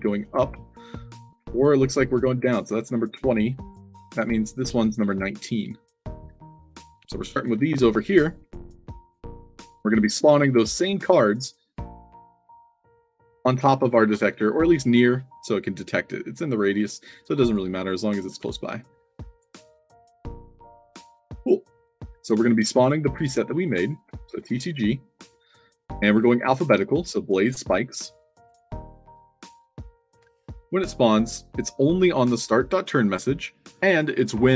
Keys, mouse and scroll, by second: 3.6 click, 5.5 space, 5.5 d, 6.5 click, 7.0 alt+drag, 7.1-8.0 typing, 7.9 click, 8.9 click, 9.5 middle click, 10.9 alt+click, 15.2 click, 16.9 click, 17.3 click, 17.8 click, 18.4-19.3 alt+drag, 19.4-20.8 typing, 22.7 click, 23.6 click, 24.2 c, 28.4 click.